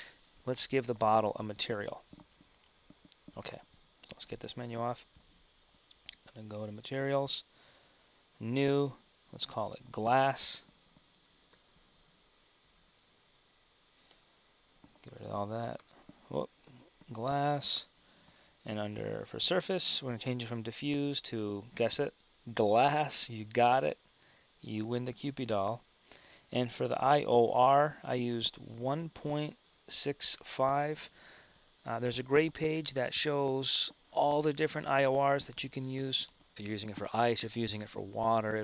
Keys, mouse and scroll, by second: 1.7 Tab, 2.5 Tab, 3.2 KP_1, 4.5 n.